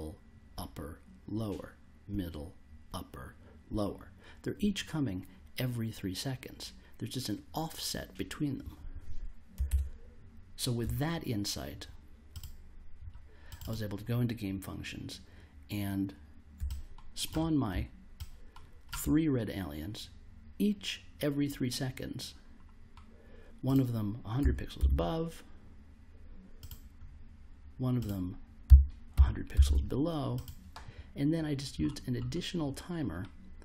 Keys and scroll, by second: 9.6 super+Tab, 24.4 1, 24.7 0, 28.4-30.0 typing.